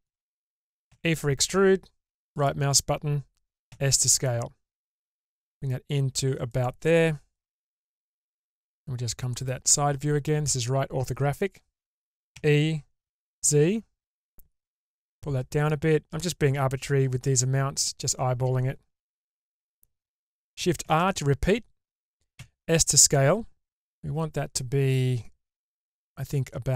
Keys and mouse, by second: 0.9 e, 3.7 s, 8.3-9.4 middle drag, 12.3 e, 20.8 shift+r, 22.3 s.